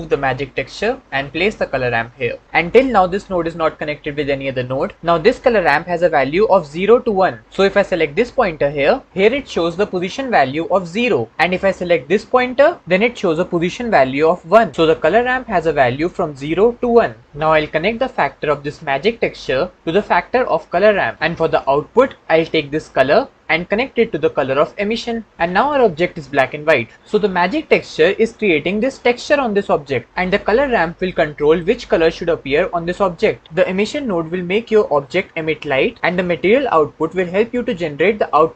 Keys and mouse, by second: 0.0 click, 1.4-2.4 drag, 8.1 click, 11.8 click, 18.6-20.8 drag, 22.2 click, 22.7-24.4 drag.